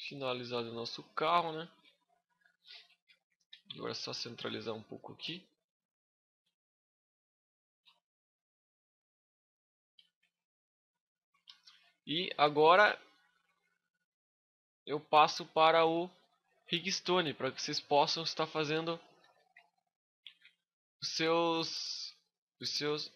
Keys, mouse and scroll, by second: 1.8 shift+middle click, 2.4 middle click, 2.8 z, 3.2 scroll down 4, 3.4 middle click, 3.8 b, 6.0 click, 7.8 middle click, 9.8 z, 10.0-10.4 scroll up 5, 10.4 middle click, 10.8 shift+middle click, 10.9 shift+middle click, 11.2 a, 11.5 middle click, 14.9 scroll up 1, 15.0 middle click, 17.1 shift+middle click, 17.5 middle click, 19.2 alt+z, 19.5 middle click, 20.0 alt+z, 20.4-20.9 scroll down 2, 20.8 right click, 21.3 middle click, 22.3 w, 22.9 click.